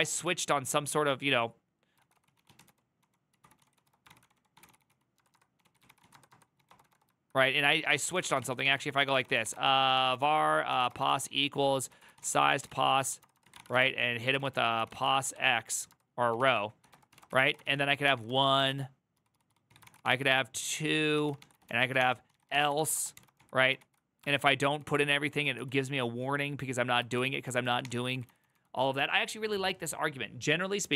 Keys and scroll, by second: 0.0-0.4 typing, 1.6-28.5 typing, 8.3 ctrl+c, 20.5 ctrl+a, 20.7 ctrl+a.